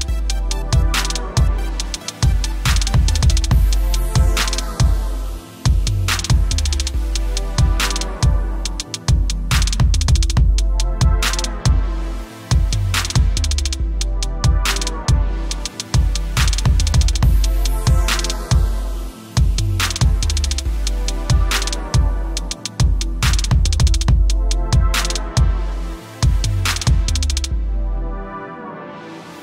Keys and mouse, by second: 0.9-1.5 typing, 4.8 typing, 6.6-7.2 typing, 9.9-11.5 typing, 17.2 click, 20.0 click, 26.5 click.